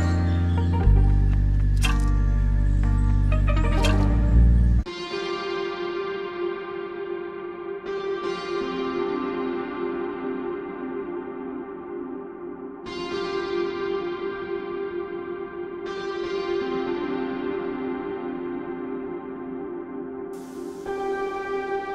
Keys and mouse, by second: 2.5-5.5 drag, 7.7 click, 11.6 click, 17.5 click, 19.1 click, 21.4 click.